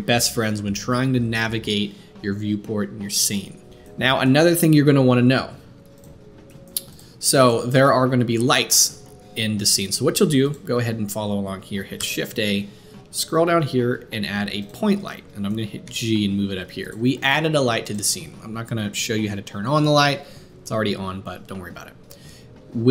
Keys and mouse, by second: 0.0-6.9 middle drag, 6.9-10.5 drag, 7.7 shift+a, 10.5 middle click, 12.0 shift+a, 15.8 g, 17.8 click, 21.4-22.9 drag.